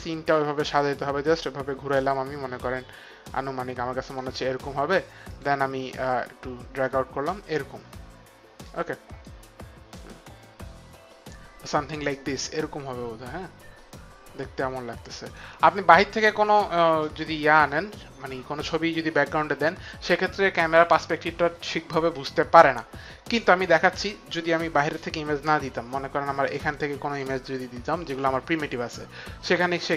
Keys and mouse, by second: 0.5 right click, 5.2 click, 6.0 middle click, 9.2 right click, 24.3 click.